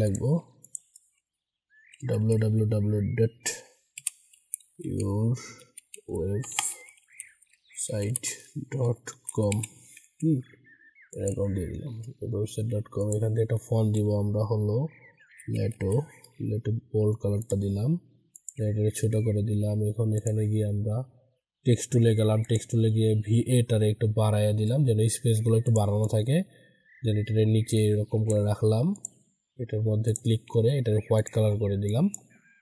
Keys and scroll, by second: 9.9 ctrl+a, 30.4 ctrl+a.